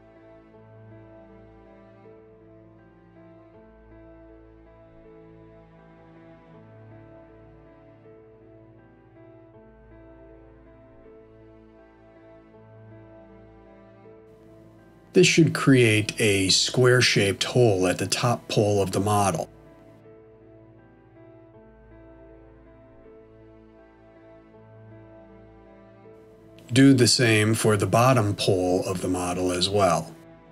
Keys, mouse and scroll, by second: 0.6 middle click, 3.5 click, 4.9 shift+click, 6.3 f, 7.1 middle click, 8.5 shift+middle click, 10.5 click, 11.7 shift+click, 12.9 f, 13.6 middle click, 16.0 click, 17.7 shift+click, 18.9 f, 19.7 middle click, 26.1 shift+middle click, 28.0 click, 29.0 shift+click.